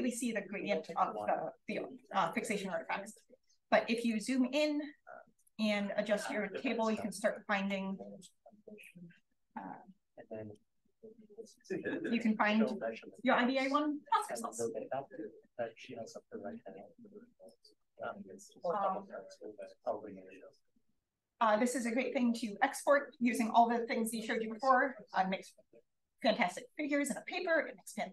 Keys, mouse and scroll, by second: 2.6-3.9 scroll up 1, 3.9 click, 3.9-5.4 scroll up 1, 5.4-6.9 drag, 7.6 d, 10.1-12.6 typing, 10.5 click, 14.1 d, 14.6 d, 15.1 d, 15.4 d, 16.8 click.